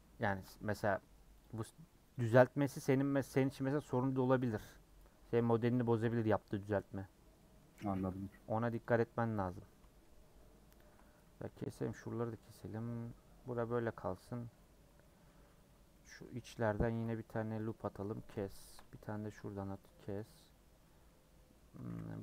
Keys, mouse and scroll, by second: 0.6 middle click, 1.4 shift+Left, 2.1 shift+click, 2.3-4.1 middle drag, 4.1 KP_Add, 5.1 scroll down 3, 5.4 middle click, 6.1 click, 6.3 scroll down 2, 6.6 middle click, 6.9 scroll up 2, 7.4 middle click, 7.7 2, 9.6 scroll down 2, 9.8 shift+middle click, 10.8 alt+shift+click, 11.5 middle click, 12.0 scroll down 2, 12.3-14.1 middle drag, 14.1-15.1 scroll up 3, 15.1-16.2 middle drag, 16.2 scroll down 1, 16.4 middle click, 16.9 ctrl+r, 18.3 shift+middle click, 19.2 ctrl+r, 20.3 scroll down 2, 20.5-21.8 middle drag, 21.8 a.